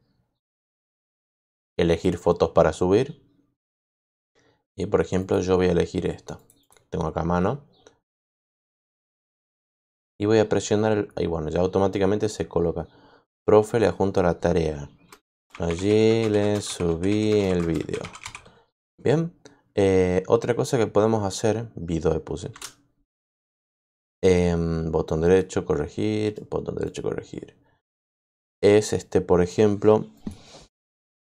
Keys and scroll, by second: 15.0-18.6 typing, 22.4 shift+Return.